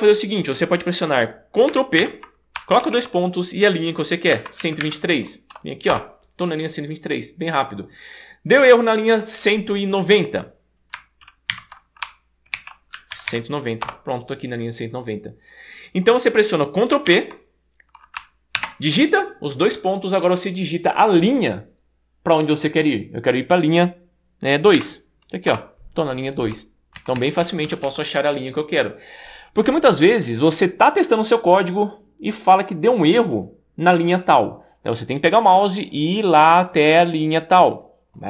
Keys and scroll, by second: 2.0 super+p, 2.8 shift+;, 4.1-5.3 typing, 5.9 Return, 11.6 super+p, 12.3-13.8 typing, 13.9 Return, 18.7 shift+;, 24.8 2, 25.5 Return, 27.0 Down, 27.2 Down, 27.4 Down, 27.6 Down, 27.8 Down.